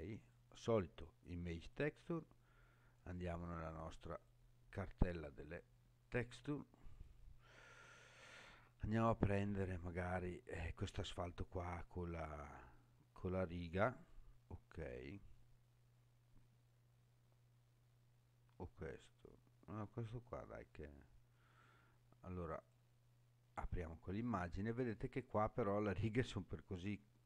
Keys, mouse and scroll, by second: 0.2-1.8 drag, 4.2 click, 24.4-25.0 scroll up 4.